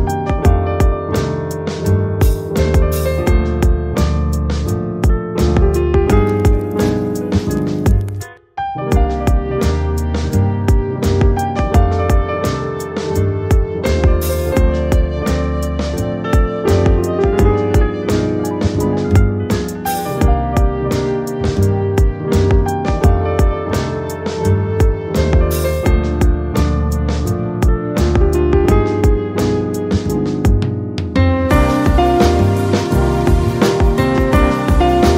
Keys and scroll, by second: 0.0 b, 0.7 c, 1.2 BackSpace, 1.3 k, 2.8 Return, 16.4 w, 17.2 space, 17.3 p, 17.4 n, 17.6 Return, 26.1 Tab, 26.6 ctrl+v, 27.6 ctrl+t, 28.4 Return, 30.4 Return, 35.0 ].